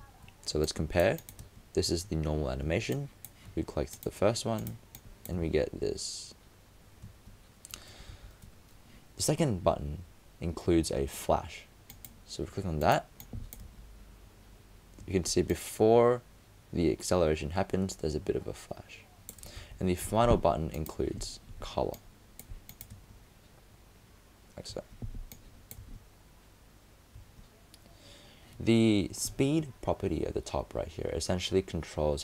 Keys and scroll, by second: 8.1 super+z, 19.5 super+z.